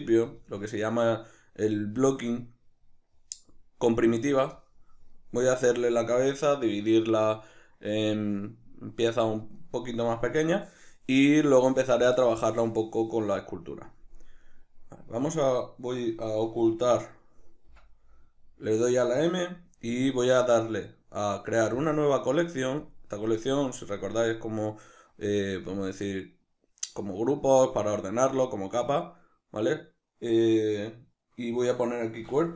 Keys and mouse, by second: 14.4 right click, 17.7 m.